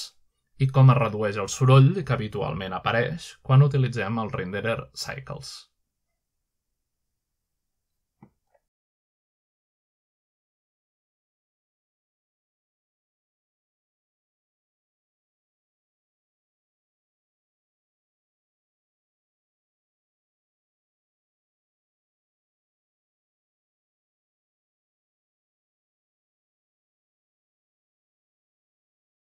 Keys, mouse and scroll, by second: 0.3-0.8 typing, 1.2 scroll up 1, 2.1-3.3 middle drag, 2.7-3.3 typing, 3.7-5.2 scroll down 1, 6.5 click, 8.3-9.0 typing, 9.7 alt+click, 10.5 F11, 12.0 click, 12.8 click, 13.5 drag, 14.6-15.2 scroll up 1, 15.4-16.1 scroll down 1, 17.0 F12, 19.0 scroll up 1, 20.0-20.4 scroll down 1, 21.1-21.9 scroll up 2, 21.3-24.0 typing, 24.6 scroll down 1, 25.1-25.9 typing, 25.4-26.8 scroll down 2, 26.8 scroll down 1, 27.2 click, 28.6 click.